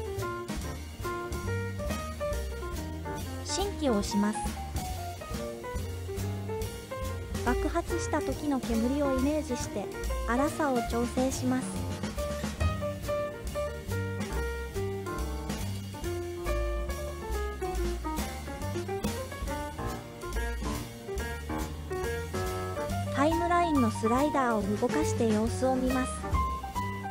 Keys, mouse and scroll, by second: 2.0 scroll down 1, 5.0 click, 5.0 scroll down 4, 8.5 click, 11.9-17.0 drag, 19.7 click, 20.5 click, 22.7 click, 23.7-27.1 drag.